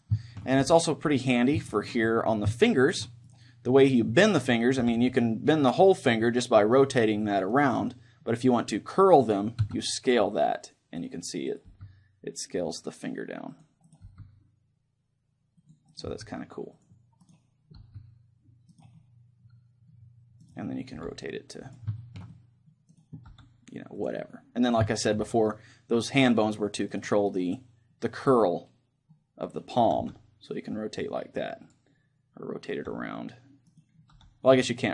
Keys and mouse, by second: 0.2-4.5 middle drag, 3.3-5.2 right drag, 4.8 r, 7.8-9.6 right drag, 9.6 s, 11.2-13.4 right drag, 11.8 s, 13.8-15.4 drag, 14.0-15.6 right drag, 14.0 s, 15.8-18.7 drag, 16.0-22.4 right drag, 16.3 s, 18.0 s, 19.0-20.8 middle drag, 21.1 r, 21.9-23.8 drag, 22.0 middle click, 23.0-24.8 right drag, 23.4 r, 24.2-25.8 drag, 24.2-27.7 middle drag, 27.0-29.0 right drag, 28.2 click, 29.0-31.0 middle drag, 30.0 r, 32.0-33.8 drag, 32.8 r, 33.9-34.9 right drag.